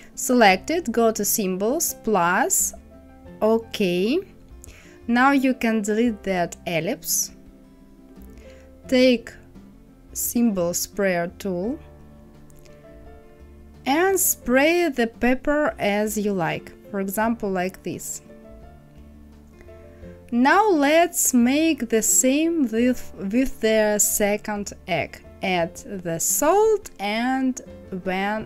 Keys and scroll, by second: 7.8 Delete.